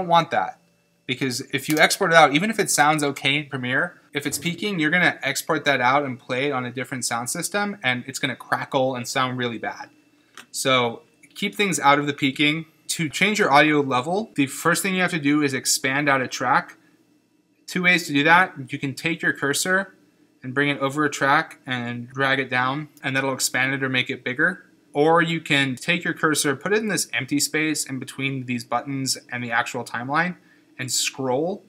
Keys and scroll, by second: 1.7 space.